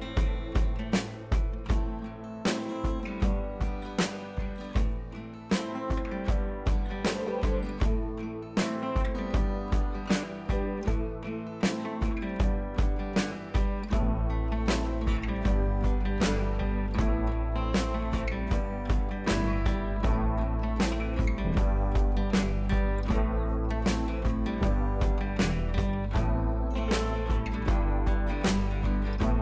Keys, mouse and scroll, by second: 14.6-20.3 drag, 26.7-29.1 drag.